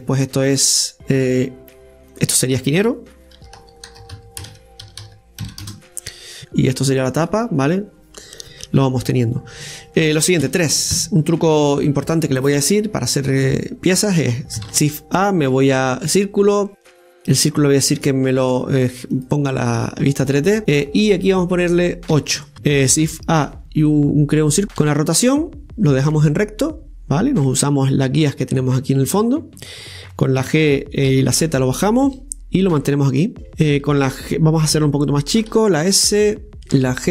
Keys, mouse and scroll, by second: 0.6 click, 2.1 click, 2.2-5.2 drag, 7.0 right click, 10.4 scroll up 2, 10.4 KP_3, 14.6 shift+a, 18.0 click, 19.1-22.5 drag, 24.8 r, 30.4 g, 35.5 s.